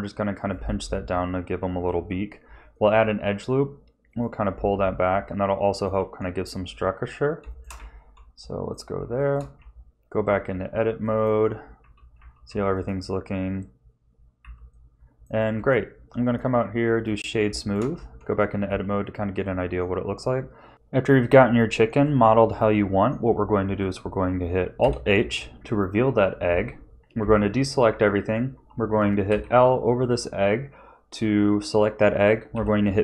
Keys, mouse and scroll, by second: 0.5 a, 1.8 ctrl+r, 4.8 a, 5.1 middle click, 5.9 Tab, 7.5 shift+middle click, 7.7 z, 8.3 middle click, 9.2 shift+middle click, 9.5 Tab, 11.0 middle click, 11.8 a, 12.1 a, 12.5 a, 12.7 right click, 14.4 a, 14.7 middle click, 15.5 Tab, 16.2 right click, 17.5 shift+middle click, 17.9 Tab, 18.6 a, 19.0 a, 19.4 middle click, 22.0 middle click, 24.8 alt+h, 26.5 a, 29.3 l, 32.5 p.